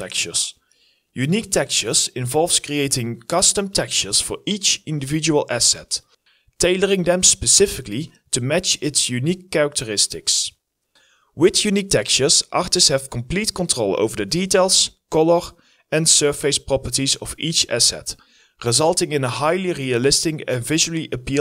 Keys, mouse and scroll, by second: 0.2 alt+right click, 0.3 alt+middle click, 0.3 alt+click, 1.0 alt+middle click, 3.4-4.2 typing, 4.0 alt+click, 4.3 alt+click, 4.4 alt+right click, 4.6 shift+right click, 4.9 alt+right click, 5.1 alt+click, 5.2 alt+middle click, 6.5 alt+click, 6.7 shift+right click, 6.7 alt+middle click, 9.2 alt+middle click, 9.4 alt+click, 9.5 alt+middle click, 9.6 alt+right click, 9.9 shift+right click, 10.3 shift+right click, 10.3-10.8 scroll down 1, 12.2-12.9 scroll down 1, 13.9-14.7 scroll up 1, 15.4 double click, 15.8-16.8 scroll up 1, 17.0-17.8 scroll down 1, 17.9-18.7 scroll down 1, 19.0-19.4 scroll up 1, 20.5 scroll down 1.